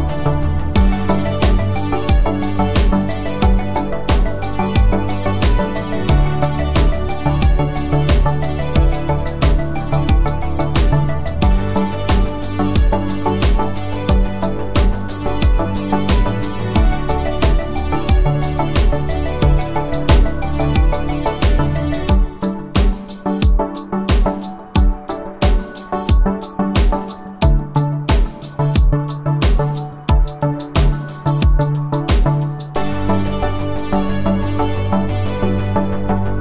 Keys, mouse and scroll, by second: 1.3-2.2 click, 3.2 ctrl+alt+click, 5.4-7.6 click, 12.6 space, 13.1-13.7 space, 14.9 ctrl+alt+click, 20.2-21.7 scroll down 1, 21.7 space, 21.9-23.1 click, 22.2 space, 28.0-29.3 click.